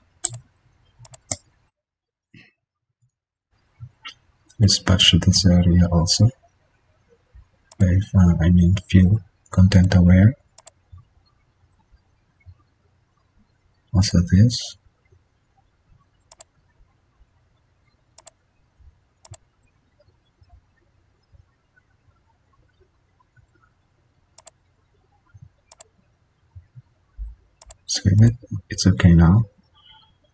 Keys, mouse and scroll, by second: 3.5 ctrl+d, 4.6 ctrl+z, 5.9 ctrl+alt+z, 21.5 ctrl+d.